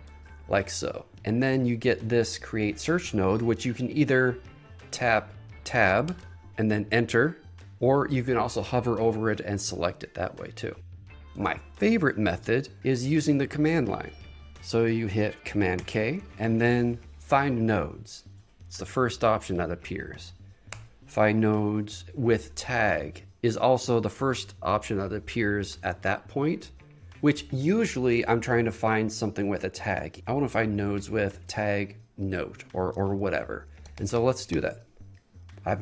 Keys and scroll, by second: 0.1 shift+/, 6.2 Tab, 7.7 Return, 14.5 Tab, 15.9 super+k, 17.0 Down, 19.0 Down, 20.9 Return, 22.9 Return, 31.6 Return, 34.8 Return.